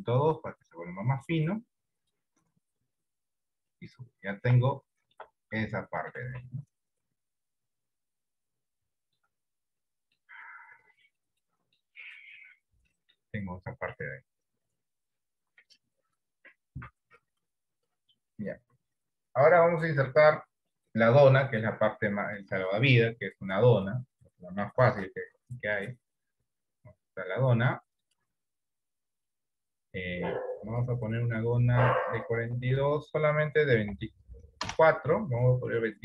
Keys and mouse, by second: 0.4 click, 2.4-3.7 drag, 4.9 shift+middle click, 5.8 shift+middle click, 7.8 click, 9.1 shift+middle click, 10.0 middle click, 10.6 middle click, 11.5 middle click, 13.1 shift+middle click, 25.0 shift+a, 30.8 click, 32.3-35.3 drag.